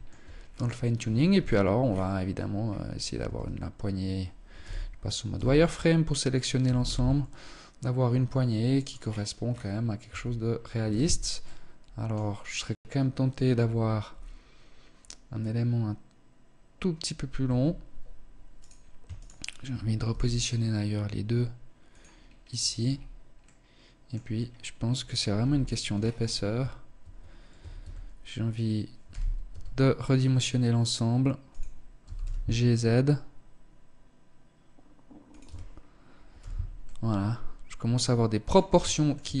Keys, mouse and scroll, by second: 0.7 KP_1, 1.2-2.0 scroll down 2, 1.7-2.6 scroll up 4, 2.6-4.0 scroll up 2, 2.6 a, 4.0 z, 4.7 b, 6.0 g, 8.3-9.2 scroll down 8, 9.2 Tab, 10.3 z, 10.8 middle click, 16.7 KP_1, 17.9 right click, 18.5 shift+right click, 19.3 g, 21.5 scroll down 1, 22.1-22.5 scroll down 4, 22.7 middle click, 23.5-24.4 scroll up 4, 24.7 KP_1, 25.3-25.7 scroll up 2, 25.7 a, 26.3 Tab, 26.9 a, 28.3 z, 28.7 s, 31.3 g, 34.7 Tab, 35.7 z, 36.1 middle click, 38.2 shift+middle click, 38.6 scroll up 4, 38.9 Tab.